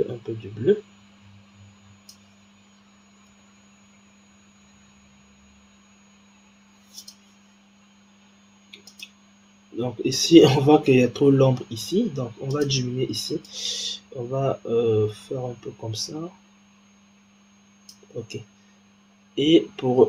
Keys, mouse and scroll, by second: 3.2 g, 7.7-8.8 scroll down 2, 8.8 click, 9.8-12.4 scroll up 3, 12.4 click, 18.9-20.0 scroll down 1.